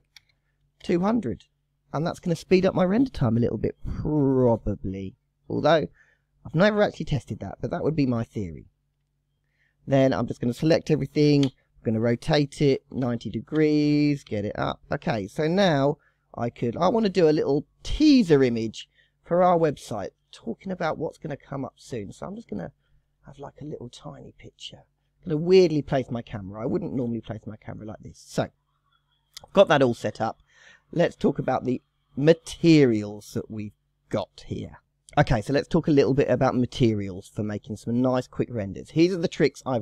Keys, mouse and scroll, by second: 0.3 KP_0, 8.4 KP_1, 8.9 KP_3, 9.7 click, 11.5 r, 14.2 g, 15.6 KP_0, 16.1 scroll down 2, 16.3-17.2 scroll up 6, 17.4-18.8 middle drag, 18.8-19.2 scroll up 2, 19.2-21.5 middle drag, 21.5 scroll up 1, 21.7-24.9 middle drag, 24.9-25.5 scroll up 1, 25.5-25.8 scroll down 1, 25.8 shift+middle click, 26.4 scroll down 1, 26.6-30.2 middle drag, 30.7 click, 38.1-39.8 drag.